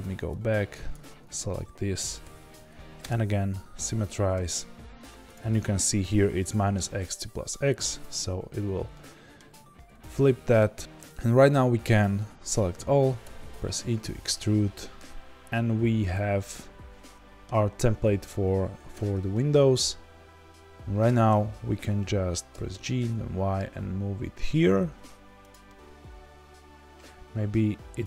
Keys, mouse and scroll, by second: 0.9 click, 3.0 F3, 8.9-28.0 middle drag, 9.4-9.8 scroll down 2, 9.8 a, 10.8-12.1 scroll down 2, 12.1 a, 13.2 e, 18.9 Tab, 22.6 g.